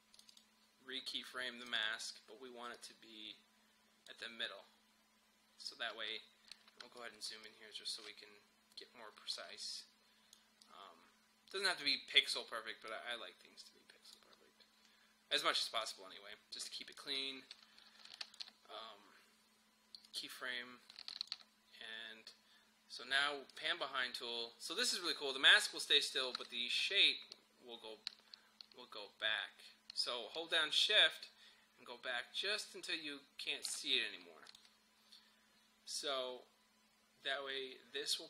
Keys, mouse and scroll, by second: 6.3 scroll up 1, 6.8 space, 7.0 click, 7.4 space, 7.4 click, 7.6 space, 9.4 scroll up 1, 9.5 space, 9.7 click, 10.0 space, 10.6 click, 10.8 space, 12.9-14.4 drag, 14.4 scroll down 1, 15.4 click, 18.2 shift+click, 26.3-38.2 drag.